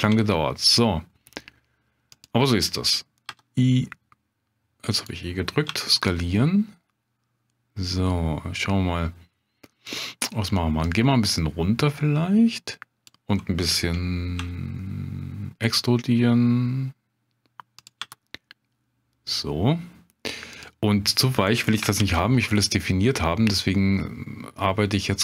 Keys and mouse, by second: 0.1 s, 2.1 click, 3.3 e, 5.7 s, 9.9 click, 10.9-13.1 drag, 14.4 e, 17.8 click, 18.0 s, 20.5 click, 22.0 ctrl+b.